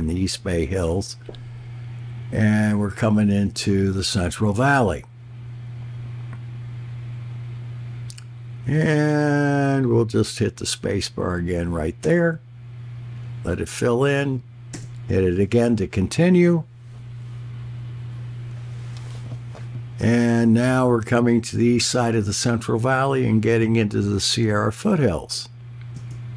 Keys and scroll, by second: 12.1 space, 14.8 space, 26.0 space.